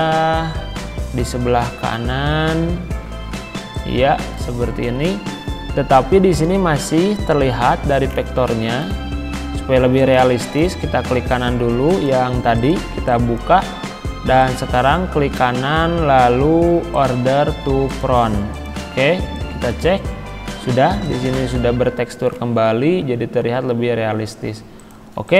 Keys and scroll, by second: 1.0 ctrl+g, 13.9 ctrl+z, 19.0 z.